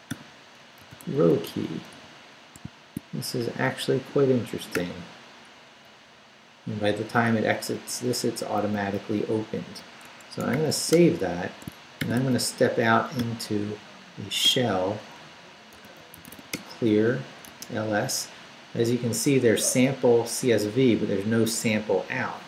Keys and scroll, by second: 0.0-2.6 typing, 4.7 ], 5.7 Down, 6.9 Up, 8.4 Down, 10.0 Escape, 10.5-13.7 typing, 10.9 Return, 11.6 shift+Return, 14.4 Return, 15.5-17.4 typing, 17.6 Return.